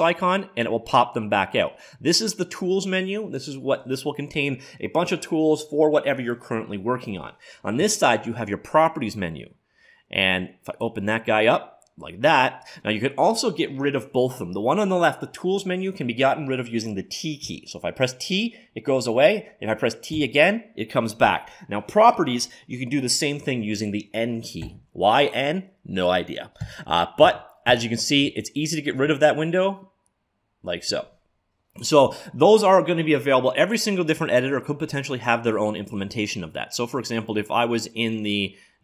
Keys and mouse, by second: 0.0-1.5 drag, 10.7-12.5 drag, 17.5 t, 20.1 t, 24.7 n, 26.6-29.1 typing, 30.8 n, 35.2-37.0 drag.